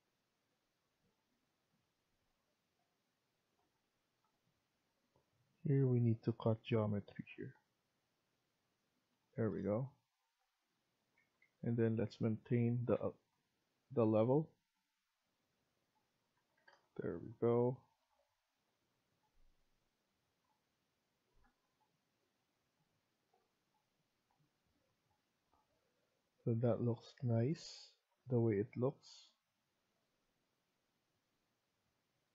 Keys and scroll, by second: 4.4 Escape, 4.8 Escape, 9.0 Escape, 9.3 Escape, 11.1 Escape, 11.3 Escape, 12.1 Caps_Lock, 12.6 Escape, 12.8 Escape, 13.2 typing, 14.3 typing, 16.2 Escape, 16.4 Escape.